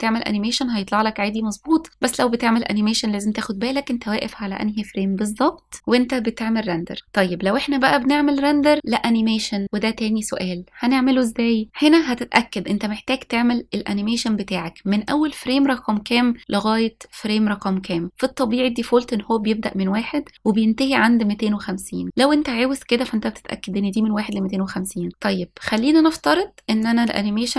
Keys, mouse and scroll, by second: 15.1 click.